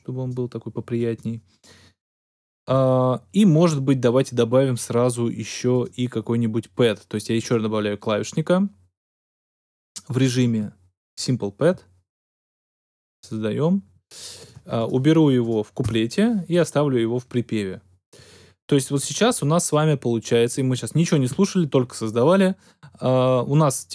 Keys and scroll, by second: 15.7 BackSpace, 15.9 BackSpace.